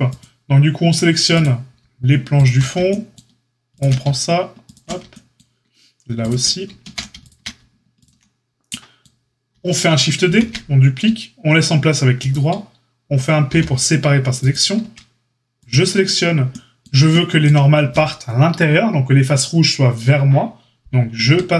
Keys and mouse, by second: 0.1-1.3 drag, 1.3 middle click, 2.3 ctrl+click, 2.4-3.7 ctrl+middle drag, 3.7 shift+click, 3.7-6.2 ctrl+shift+middle drag, 6.2 shift+click, 6.2 shift+middle click, 6.8 ctrl+z, 7.2 click, 7.3-7.9 ctrl+middle drag, 7.9 click, 8.0-15.5 middle drag, 10.2 shift+d, 13.4 p, 14.8 Tab, 15.5 click, 15.7-21.5 middle drag, 21.2 Tab.